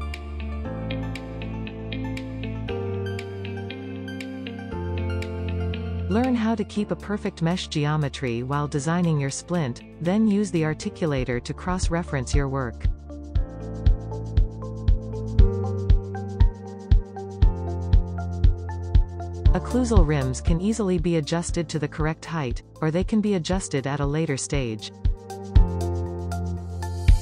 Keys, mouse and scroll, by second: 0.2 scroll down 1, 0.4 shift+middle click, 0.8 scroll up 6, 1.2 drag, 1.4-2.2 drag, 2.8 click, 3.2-3.8 scroll down 1, 3.8 middle click, 3.9 alt+b, 4.6 click, 5.0 click, 5.4 Tab, 5.5-8.1 scroll up 5, 11.2-12.3 drag, 13.3 shift+middle click, 13.8-15.6 click, 15.6 click, 18.4 click, 19.0 scroll up 1, 20.4 click, 21.2 middle click, 21.4 scroll up 2, 21.6 click, 22.5-23.5 drag, 23.5 scroll down 1, 23.8 middle click, 24.2 scroll down 1, 24.4 Tab, 25.3 click, 26.3 scroll down 1, 26.5 middle click, 27.1-27.2 scroll up 1.